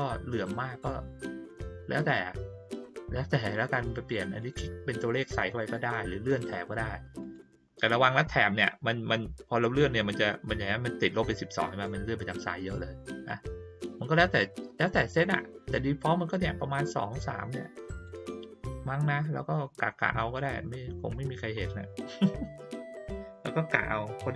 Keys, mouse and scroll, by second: 4.4 click, 5.2 click, 5.4 click, 7.2 click, 9.6-18.0 drag, 20.0 click, 20.6 middle click.